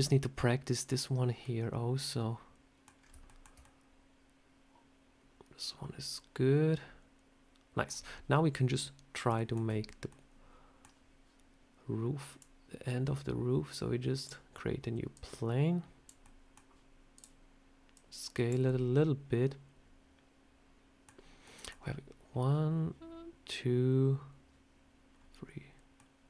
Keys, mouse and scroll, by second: 1.2 scroll up 2, 1.3 middle click, 2.8 scroll down 4, 3.1 shift+scroll up 1, 3.1 shift+middle click, 3.5 middle click, 9.2 shift+middle click, 10.0 middle click, 12.2 click, 15.0 click, 16.1 middle click, 17.0 click, 17.8 click, 18.5 middle click, 25.0 scroll down 2, 25.9 middle click.